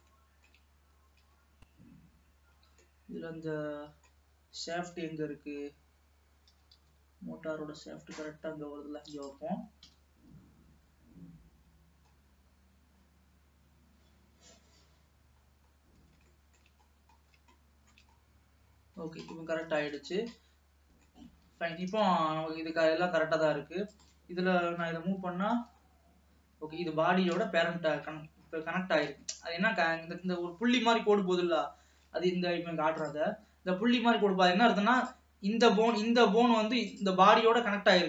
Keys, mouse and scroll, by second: 0.2-1.2 shift+middle drag, 1.2-2.6 scroll up 7, 2.6 scroll down 1, 3.0-5.0 middle drag, 5.0 KP_7, 5.7-6.1 scroll up 2, 6.6 g, 9.9 KP_3, 11.6-12.2 scroll down 2, 12.2 scroll up 2, 13.1-15.1 scroll down 2, 15.6-16.4 scroll down 9, 16.4 shift+middle click, 17.0-17.7 scroll up 9, 17.7 shift+middle click, 18.3-18.8 scroll up 1, 18.8-20.0 scroll down 13, 20.0 ctrl+s, 20.7 middle click, 21.6-22.0 scroll up 2, 22.0 ctrl+s, 22.4 alt+a, 22.9 middle click, 23.4-24.0 scroll up 2, 24.0 click, 25.0 g, 27.2-29.4 scroll down 2, 29.4 ctrl+s, 31.8 shift+middle click, 32.5 scroll up 1, 33.2 click, 35.1 click, 36.0 click, 36.9 click.